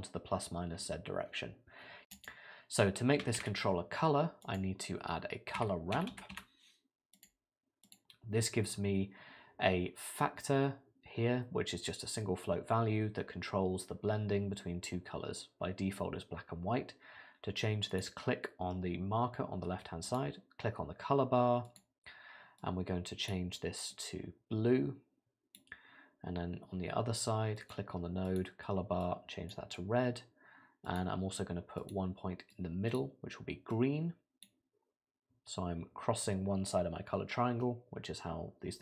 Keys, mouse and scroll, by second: 2.1 click, 3.4 shift+a, 17.9 click, 20.1 click, 27.6 click, 28.3 click, 31.8 click.